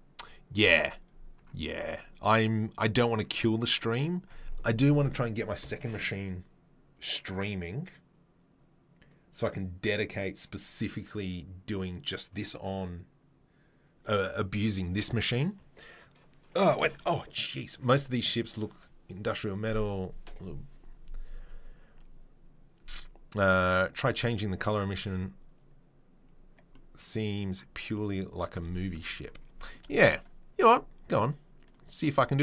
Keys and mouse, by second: 30.1-31.7 drag, 31.7 middle click, 31.9-32.4 drag.